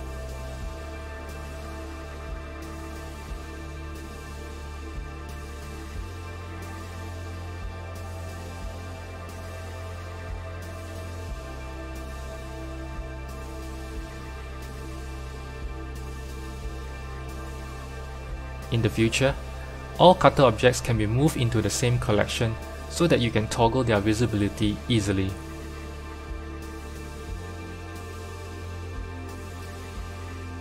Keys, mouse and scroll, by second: 1.2 click, 1.9-3.4 middle drag, 3.4 shift+click, 4.8 ctrl+p, 6.4 click, 7.3 click, 7.9 click, 9.1 g, 11.3-13.1 middle drag, 13.1 click, 14.0 shift+click, 15.3-16.7 shift+middle drag, 16.7 m, 19.8 shift+t, 22.1 shift+t, 23.7-25.1 scroll down 7, 25.1 click, 27.6 click, 28.1 click, 28.9 drag, 29.5-30.1 middle drag, 30.1-30.6 scroll down 5.